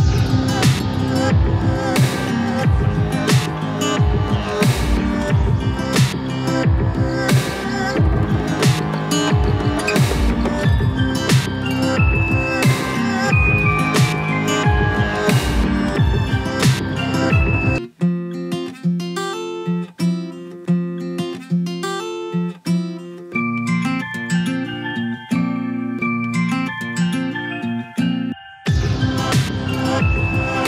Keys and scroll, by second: 18.8 ctrl+t.